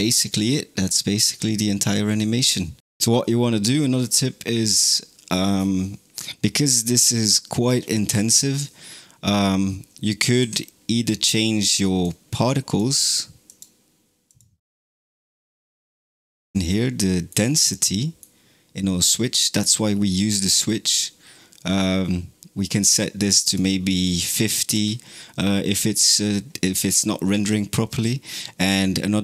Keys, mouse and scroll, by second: 4.5 click, 5.2-5.7 scroll down 12, 10.2-12.8 drag, 13.5 click, 14.3 click, 15.1-15.7 scroll down 13, 15.8 middle click, 16.3-16.7 scroll up 10, 16.9-17.3 middle drag, 17.4 scroll up 3, 17.8-20.8 middle drag, 23.3-26.4 drag, 27.4-29.2 drag.